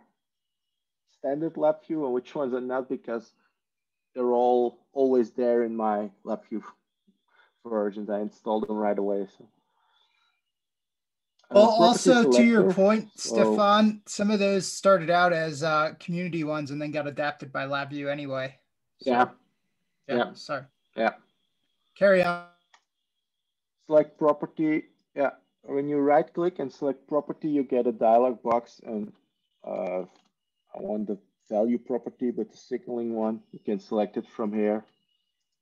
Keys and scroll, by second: 29.8-30.3 typing.